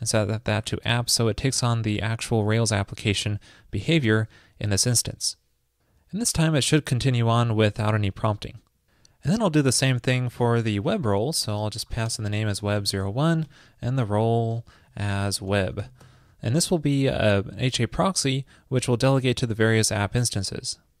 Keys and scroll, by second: 10.6 ctrl+a, 10.9 alt+Right, 12.1 alt+BackSpace, 13.7 alt+Right.